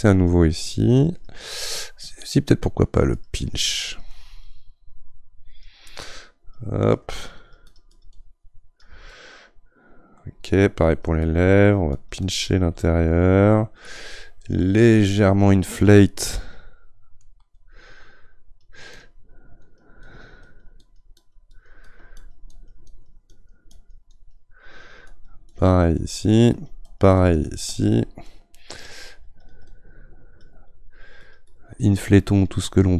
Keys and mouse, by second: 9.1-10.8 middle drag, 10.8-18.2 drag, 18.2-19.6 right drag, 19.6-28.3 drag, 28.3 middle click, 29.3-32.9 drag.